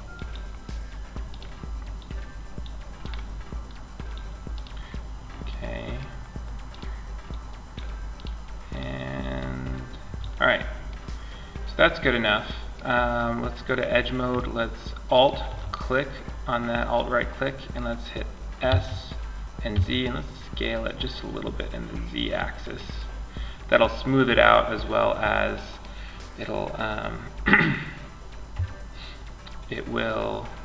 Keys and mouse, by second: 0.5 click, 4.7-6.5 middle drag, 8.0-10.4 right drag, 10.4-12.7 middle drag, 12.9-14.3 right drag, 14.8-16.1 right drag, 16.1-17.9 middle drag, 17.9 s, 21.5-23.2 drag, 23.2 middle click.